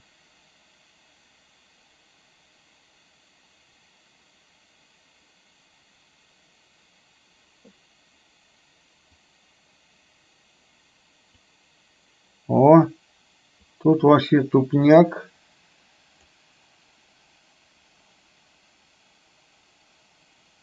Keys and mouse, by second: 9.3-11.5 drag, 13.9-16.4 drag.